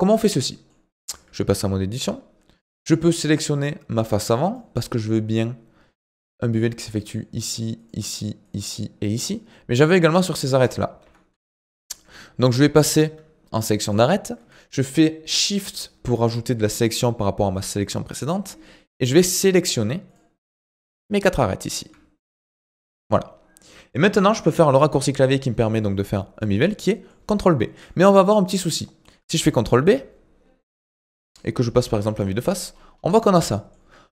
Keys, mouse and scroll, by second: 0.4 middle click, 1.0 Tab, 2.8 click, 4.5-6.8 shift+middle drag, 6.8 d, 7.0 click, 7.3-7.7 d, 7.8 click, 7.9-9.9 d, 9.9 click, 10.0-10.3 d, 11.0 ctrl+z, 11.3 ctrl+z, 11.7 ctrl+z, 12.1 ctrl+z, 12.4 ctrl+z, 13.9 click, 19.2 shift+click, 20.1 shift+click, 20.8 shift+click, 21.2-22.5 middle drag, 22.5 shift+click, 23.0-27.2 middle drag, 27.2-27.6 scroll up 2, 27.6-29.8 shift+middle drag, 29.8 ctrl+b, 31.0 middle click, 31.9 KP_1, 32.7-33.2 scroll up 5, 33.2-34.1 shift+middle drag.